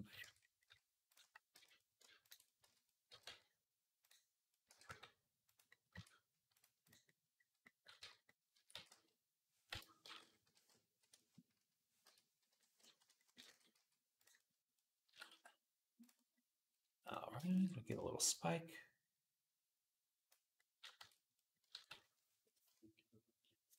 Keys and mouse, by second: 0.0 Tab, 0.2-5.5 middle drag, 1.3 z, 2.4 z, 2.9 g, 4.5 r, 5.5 click, 5.7 Tab, 6.3 right click, 7.5-20.9 right drag, 7.8 Tab, 8.3 a, 8.5 s, 10.2 ., 12.3 ., 13.3 s, 14.9 s, 18.1-20.9 drag, 18.1-20.9 middle drag, 20.8 Tab, 21.7 ctrl+s, 23.7 KP_3.